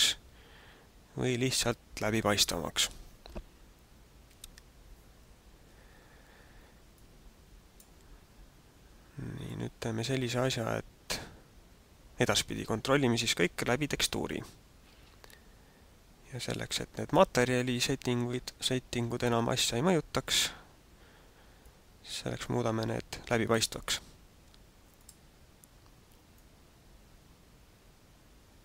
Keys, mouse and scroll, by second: 4.2 Escape, 7.0 click, 9.4 click, 19.0 click, 21.6 click, 25.0 click, 26.3 click.